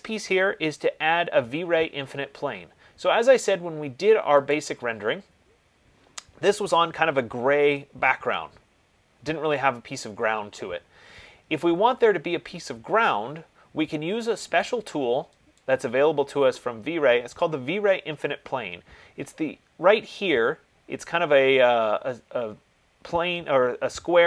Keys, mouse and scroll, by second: 4.8 click, 9.7 click, 15.9-20.8 drag.